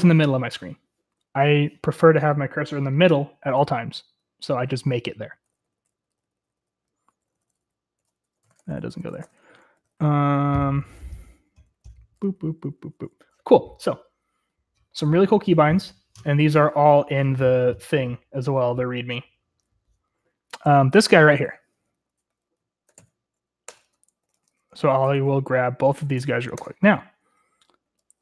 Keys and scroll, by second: 0.5-1.6 typing, 3.1-13.3 typing, 21.4 j, 22.4 :, 23.4 ctrl+r, 23.5 ctrl+l, 24.0-26.7 typing, 27.1 ctrl+r, 27.4 ctrl+l, 27.5 Return.